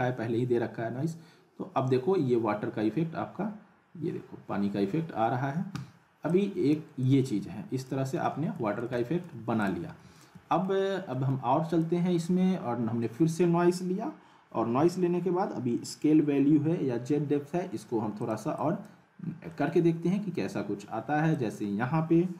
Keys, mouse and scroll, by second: 6.3-6.9 drag, 8.2-8.8 alt+middle click, 9.6 click, 9.9 scroll up 1, 10.1-10.8 middle click, 10.8 scroll down 1, 11.1 middle click, 11.7 click, 18.2 click, 19.5-21.3 middle drag, 21.3 click.